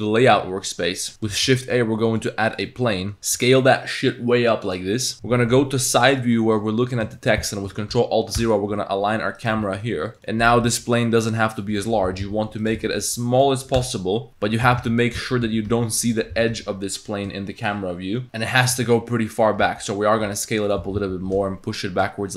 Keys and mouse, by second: 0.0 click, 1.4 shift+a, 3.2 s, 5.1 KP_1, 5.5 KP_Decimal, 5.5 KP_3, 7.2 shift+middle click, 8.4 ctrl+alt+KP_0, 9.4 click, 9.6 g, 10.3 click, 10.7 s, 11.8 click, 12.1 g, 13.8-16.3 typing, 18.2 Tab, 18.7 Tab, 19.6 s, 20.8 g.